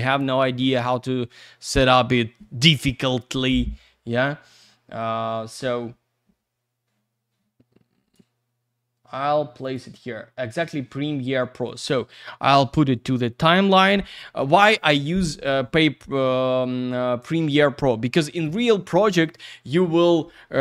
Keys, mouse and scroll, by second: 4.2 click, 9.6 click, 9.7 click, 11.6 click.